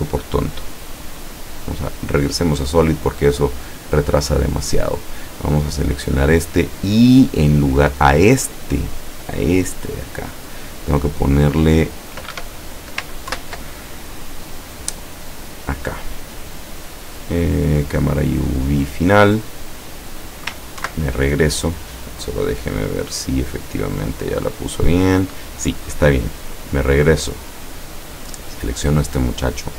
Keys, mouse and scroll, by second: 1.6 click, 5.5 right click, 10.2 click, 12.4 Escape, 13.4 ctrl+BackSpace, 16.7 click, 18.1 click, 20.8 ctrl+Right, 23.0 click, 24.1 click, 26.4 click, 27.3 click, 28.8 right click.